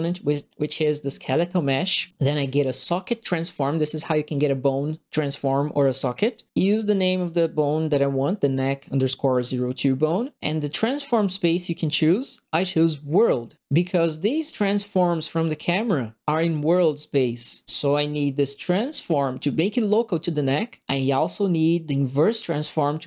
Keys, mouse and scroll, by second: 2.9 click, 7.1 click, 11.0 click, 13.1 click, 13.5 right click, 14.9-16.2 drag, 16.2 right click, 17.6 right click, 18.7 click.